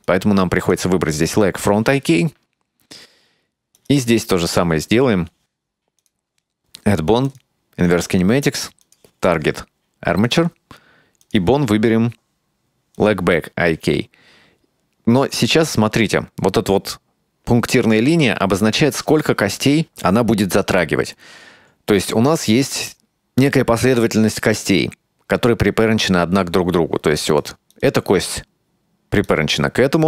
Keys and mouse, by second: 3.9 right click, 6.2-7.5 drag, 8.9-10.5 drag, 11.3-13.3 drag, 27.4 right click, 27.8 right click, 29.4 right click.